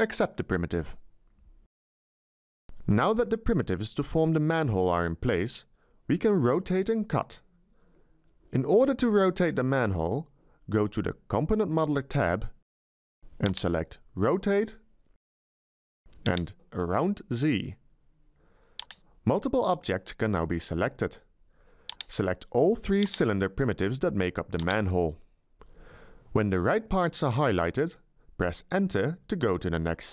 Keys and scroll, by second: 0.3 Return, 28.6 Return.